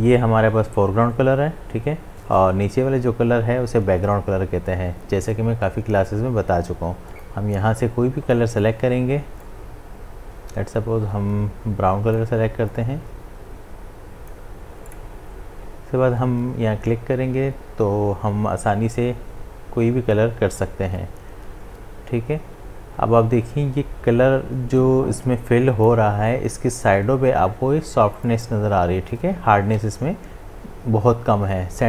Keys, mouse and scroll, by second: 7.1 click, 9.4-14.9 drag, 20.6-28.1 drag, 28.2 click, 29.7 ctrl+z.